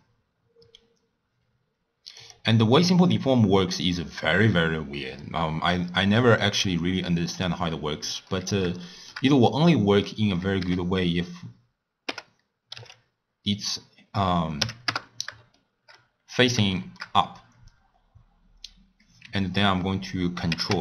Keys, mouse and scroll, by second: 2.1 click, 3.1-6.1 drag, 8.3-9.3 middle drag, 9.3-9.7 scroll down 1, 9.7-10.6 middle drag, 10.6 r, 15.5-15.9 shift+middle drag, 15.9 scroll up 1, 16.1 scroll down 2, 16.3 scroll up 1, 16.4-16.7 scroll down 1, 16.7 shift+middle click, 16.9-17.5 scroll down 1, 17.5-20.0 scroll down 1, 20.5 ctrl+a.